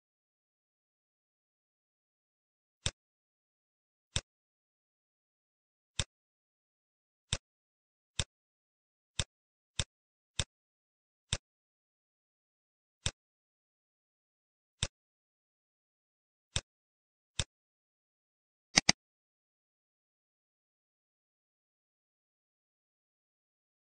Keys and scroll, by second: 0.1 ctrl+0, 21.0 Caps_Lock, 21.6-23.1 typing.